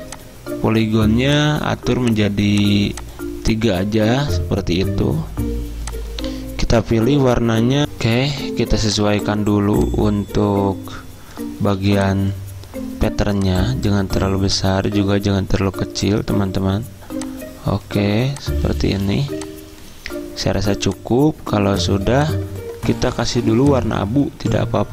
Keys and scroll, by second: 7.8 F9, 11.9 z.